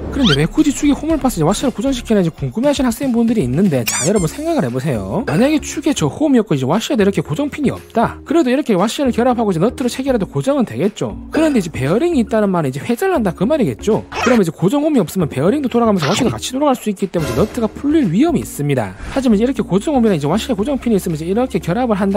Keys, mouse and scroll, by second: 8.2-9.7 drag, 10.1-11.3 drag, 11.6 middle click, 12.5 click, 13.0-14.8 drag, 15.0 click, 15.6-16.8 drag, 17.0 click, 17.7-18.5 drag, 18.7 drag, 21.6-22.1 drag.